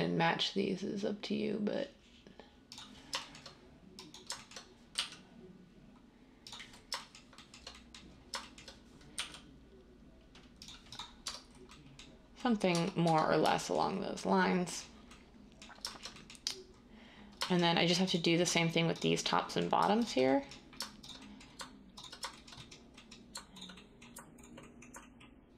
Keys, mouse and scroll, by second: 4.9 g, 9.1 g, 11.2 Tab, 12.7 Tab, 13.0 Tab, 18.4 Tab.